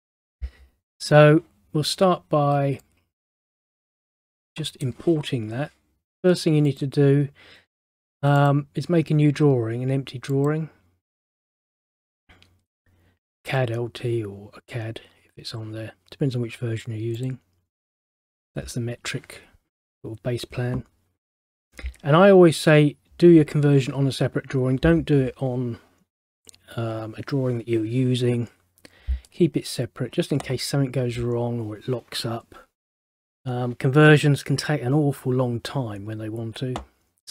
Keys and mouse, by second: 2.9 click, 6.8 click, 8.5 click, 10.4 click, 17.3 click.